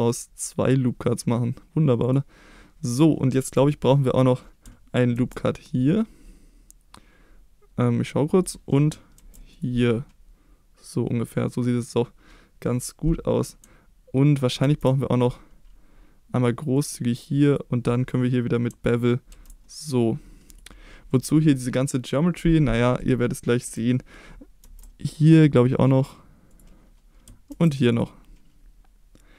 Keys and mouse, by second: 2.0 click, 5.1 ctrl+r, 8.4 click, 9.1 ctrl+r, 11.8 click, 14.6 ctrl+r, 17.4 click, 19.3 ctrl+b, 20.5 click, 24.6 ctrl+r, 26.5 click, 27.5 ctrl+r.